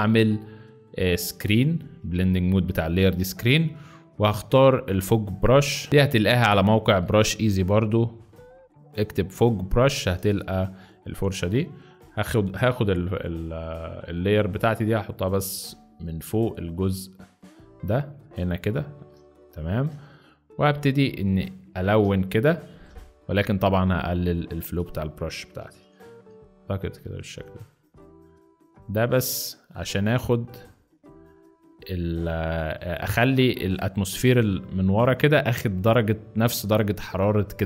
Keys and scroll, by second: 19.5 ctrl+z, 19.6 ctrl+z, 21.8 ctrl+z, 22.6 ctrl+z, 25.7 ], 26.1 ].